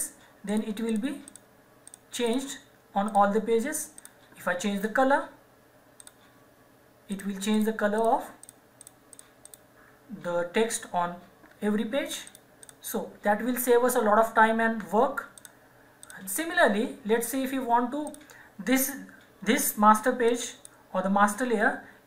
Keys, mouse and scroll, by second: 0.5 click, 12.2 click, 15.3 click, 21.5-22.0 scroll down 1.